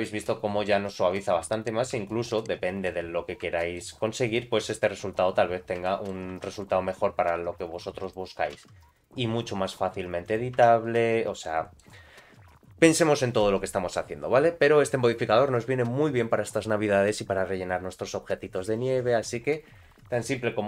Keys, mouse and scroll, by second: 0.4 scroll down 2, 0.7 middle click, 1.1 click, 1.4 middle click, 2.1 shift+middle click, 2.4 middle click, 3.1 scroll up 1, 3.6 shift+middle click, 4.2 click, 5.2 Tab, 5.8 shift+middle click, 6.3 3, 6.5 click, 7.0 scroll down 2, 8.0 click, 8.6 g, 10.7 Tab, 10.8 middle click.